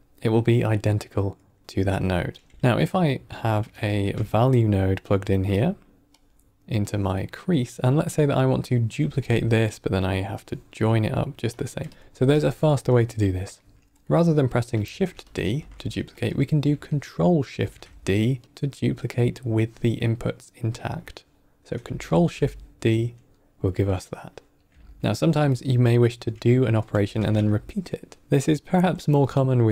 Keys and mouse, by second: 2.3 click, 2.5 x, 2.8 middle click, 3.4 middle click, 3.8 shift+a, 6.8-7.4 drag, 8.0 click, 8.9 click, 8.9 middle click, 9.0 shift+d, 10.3-10.9 drag, 11.4 drag, 11.8 click, 12.1 x, 13.3 middle click, 13.9 click, 14.8 shift+d, 15.4 x, 16.0 click, 17.4 ctrl+shift+d, 21.9 ctrl+shift+d, 24.8 ctrl+click, 24.8 ctrl+middle click, 25.4 middle click, 26.9 x, 27.6 ctrl+middle click.